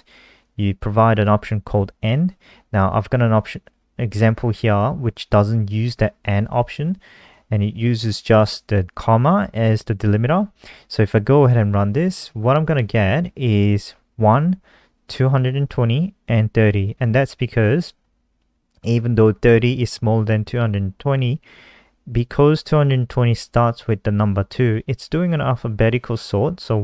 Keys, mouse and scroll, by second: 0.3 click, 11.3 ctrl+s, 11.7 F5.